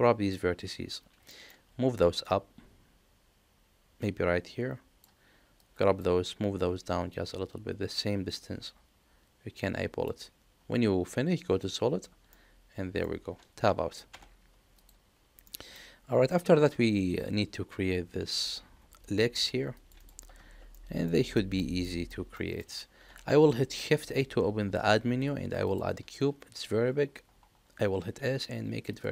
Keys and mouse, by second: 1.2 shift+middle click, 2.3-5.0 drag, 5.5 click, 7.1-10.0 drag, 11.6 click, 12.3 middle click, 14.0 Tab, 14.7 click, 15.4 middle click, 20.7 middle click, 21.3 shift+middle click, 21.8 middle click, 22.3 shift+middle click, 23.1 shift+a, 27.9 s.